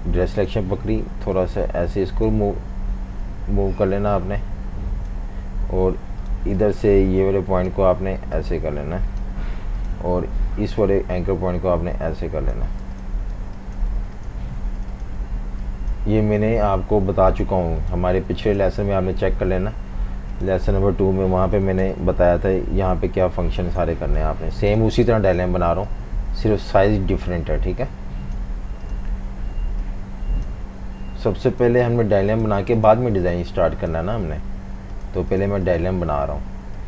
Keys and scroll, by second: 12.8 v, 13.2 v, 13.3 space, 21.3-24.3 typing.